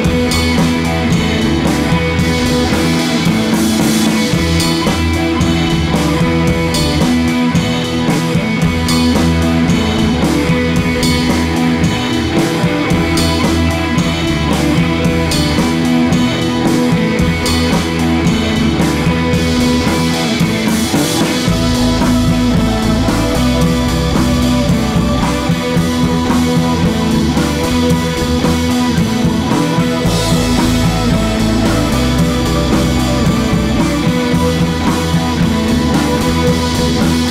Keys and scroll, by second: 11.5 super+c, 11.6 super+v, 24.0 BackSpace, 24.7 super+c, 24.8 super+v, 28.7 Left, 28.7 Left, 28.8 Left, 28.9 Left, 30.1 Left, 30.1 Right, 30.3 Right, 32.6 super+c, 32.6 super+v.